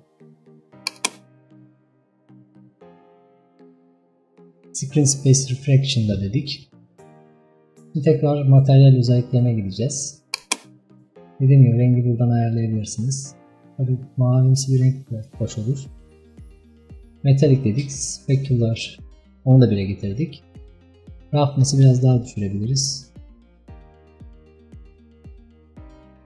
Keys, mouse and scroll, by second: 0.9 click, 21.7-24.1 drag.